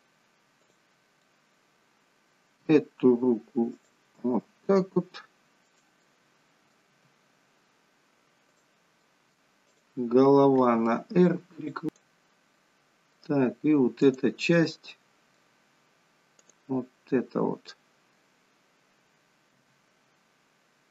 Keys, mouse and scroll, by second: 0.7 click, 1.2 middle click, 2.5 r, 4.3 g, 6.1 middle click, 7.1 g, 9.1 middle click, 9.8 click, 10.7 r, 11.8 click, 12.5 middle click, 14.1 click, 14.7 middle click, 16.5 click, 17.8 middle click, 19.6 r.